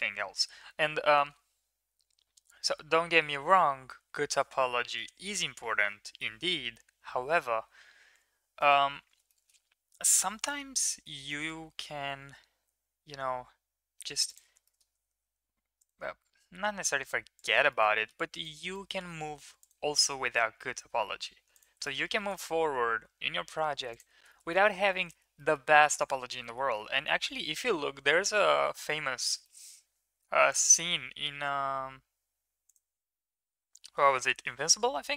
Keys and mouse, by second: 3.6 s, 9.3 shift+middle click, 10.1 middle click, 10.5 middle click, 10.9 middle click, 11.2 shift+middle click, 12.2 g, 14.6 shift+middle click, 15.1 ctrl+r, 17.7 middle click, 17.9 middle click, 18.3 shift+middle click, 18.8 middle click, 19.3 ctrl+r, 22.1 ctrl+r, 24.3 middle click, 25.1 middle click, 25.4 middle click, 25.9 shift+middle click, 26.4 middle click, 29.4 shift+middle click, 30.2 ctrl+r.